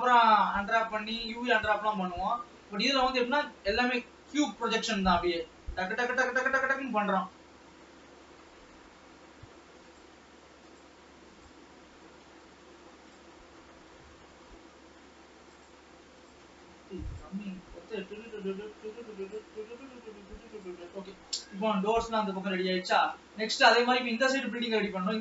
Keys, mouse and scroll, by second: 0.1 e, 0.9 s, 2.0 scroll up 3, 2.5 middle click, 3.3 s, 6.7 g, 10.9-12.0 drag, 12.0 g, 13.6 scroll down 2, 13.9-15.8 middle drag, 15.8-17.5 drag, 17.9 s, 19.7 e, 21.4 KP_0, 22.5 alt+a, 23.2 ctrl+s, 23.5-25.2 shift+middle drag.